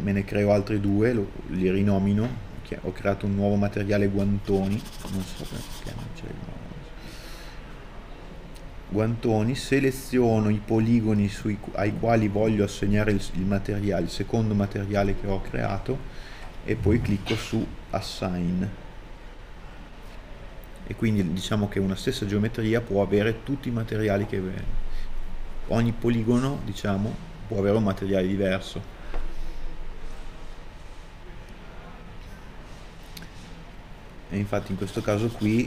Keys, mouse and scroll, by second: 0.4 alt+right click, 11.7 middle click, 17.4 alt+right click, 30.9 scroll up 1.